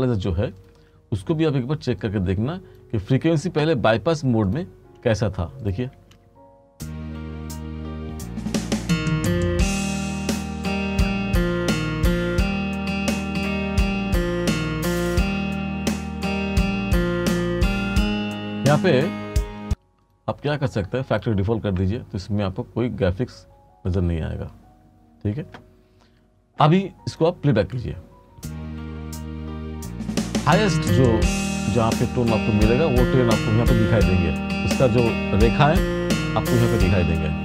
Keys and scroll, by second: 6.1 space, 19.2 space, 27.7 space.